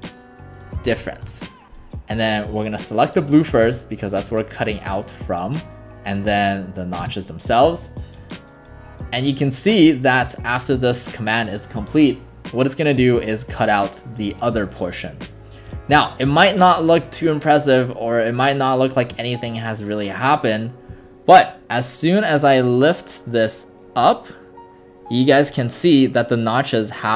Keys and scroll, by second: 0.0-1.5 typing, 3.7 space, 7.0 space.